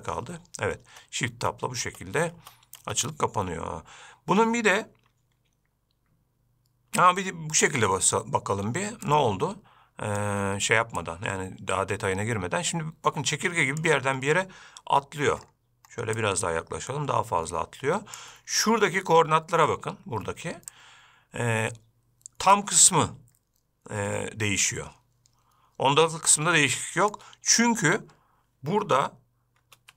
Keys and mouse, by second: 1.1 shift+Tab, 1.6 shift+Tab, 2.1 shift+Tab, 2.6 shift+Tab, 3.1 shift+Tab, 8.4 click, 9.3-10.5 shift+drag, 11.3-14.1 shift+drag, 16.4-18.5 shift+drag, 21.0-27.5 shift+drag.